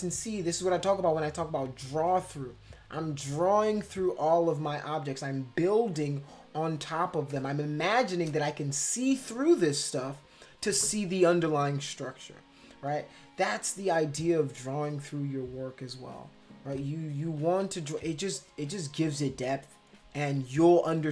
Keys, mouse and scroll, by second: 7.2 space, 7.3 click, 17.5 [, 17.9 [.